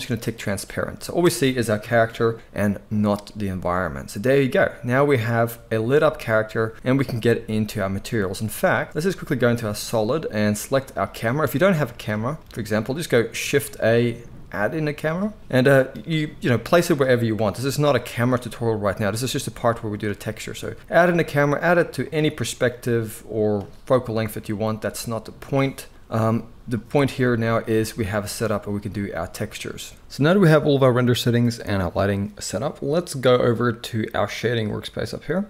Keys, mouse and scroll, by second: 1.7-2.8 middle drag, 1.7 KP_1, 4.4-30.3 middle drag, 8.4 z, 11.6 x, 13.4 shift+a, 16.0 g, 17.3 KP_0, 18.3 g, 19.8 r, 22.5 g, 23.5 g, 26.9 z.